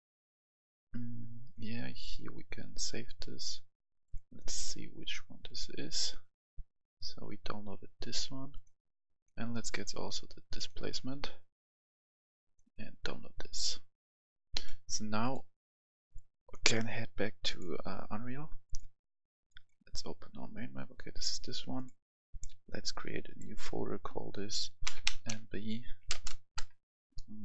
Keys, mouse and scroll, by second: 22.4 right click, 23.2 click, 24.8 shift+m, 25.0 shift+b, 26.5 BackSpace.